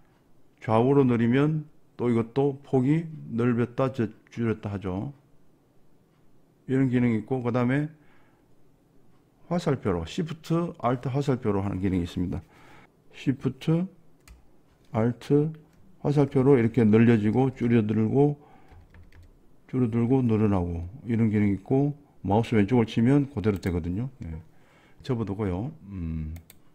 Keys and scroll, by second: 16.3 alt+shift+Up, 16.8 alt+shift+Up, 17.3 alt+shift+Down, 17.5 alt+shift+Down, 17.7 alt+shift+Down, 18.8 alt+shift+Left, 19.0 alt+shift+Left, 19.2 alt+shift+Left, 20.2 alt+shift+Right, 20.4 alt+shift+Right, 20.6 alt+shift+Right, 21.6 alt+shift+Left.